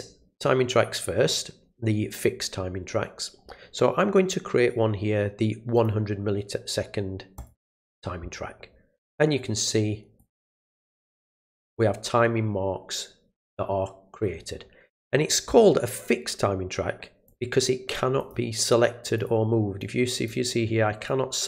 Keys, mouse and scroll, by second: 5.7 click, 7.3 click, 10.2 click, 10.4 click, 10.6 click, 10.8 click, 11.0 click, 11.2 click, 17.2 click, 18.2 click, 19.1 click, 19.8 click, 21.1 click.